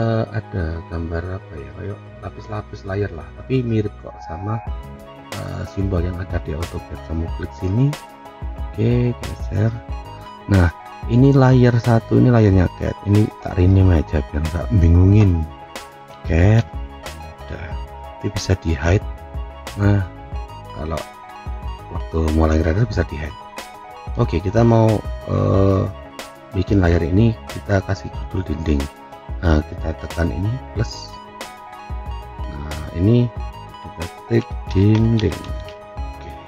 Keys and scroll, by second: 16.1 c, 17.6 d.